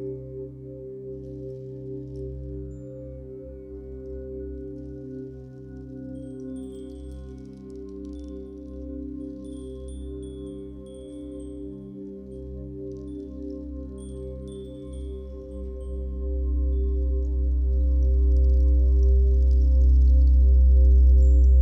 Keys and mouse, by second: 0.2-1.7 drag, 2.5 click, 4.0 click, 5.3-6.9 drag, 7.8 click, 8.9 click, 10.9 click, 15.1 click, 18.3-21.2 drag.